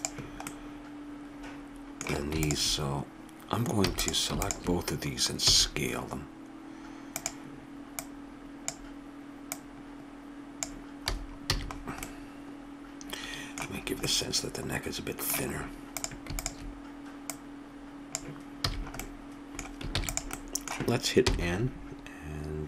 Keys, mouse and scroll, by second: 0.5-2.1 middle drag, 2.4-6.3 drag, 3.8 a, 5.5 s, 7.9-11.1 drag, 11.1 middle click, 11.5 a, 12.0 middle click, 16.0-19.0 drag, 18.7 a, 19.9 ctrl+s, 21.2 n.